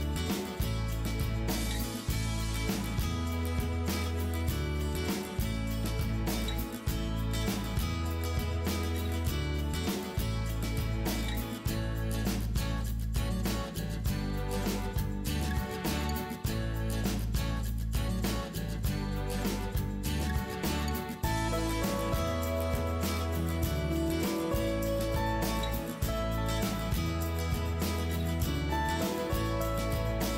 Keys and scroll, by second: 2.8 Return, 5.3 Return, 6.7 Return, 8.2 Return, 9.6 Return, 12.6 Return, 13.5 Return, 14.1 Return, 15.7 Return, 18.3 Escape, 20.3 Return, 21.0 ctrl+s, 22.6 Return, 25.1 Return, 28.7 Return, 29.9 Return.